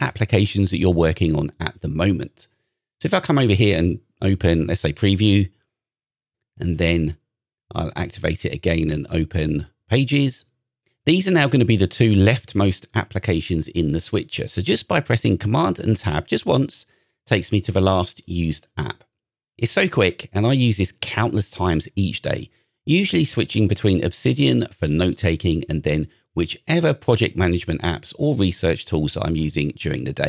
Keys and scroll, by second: 2.5 super+Tab, 3.6 super+Tab, 6.3 super+Tab, 9.9 super+Tab, 12.4 super+Tab, 14.2 super+Tab, 15.5 super+Tab, 17.3 super+Tab, 18.6 super+Tab, 20.4 super+Tab, 28.6 super+h, 29.4 super+h.